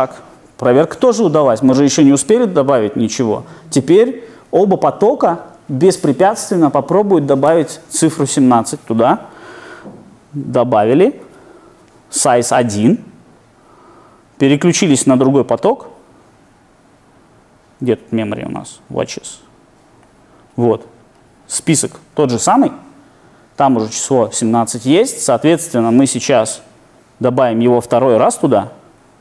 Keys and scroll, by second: 10.7 F8, 27.4 F8.